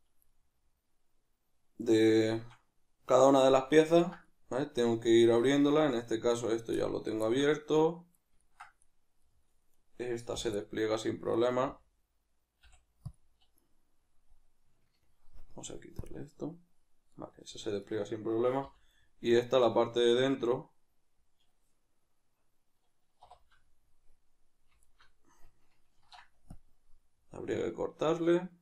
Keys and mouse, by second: 0.0 right click, 0.3-8.8 middle drag, 3.0 \, 8.8 right click, 9.2-9.8 middle drag, 9.8 right click, 10.6-11.4 middle drag, 11.4 right click, 17.1-17.8 middle drag, 17.8 right click, 18.6 l, 19.0-24.8 middle drag, 24.8 alt+right click, 25.9 ctrl+e, 27.4-28.6 middle drag.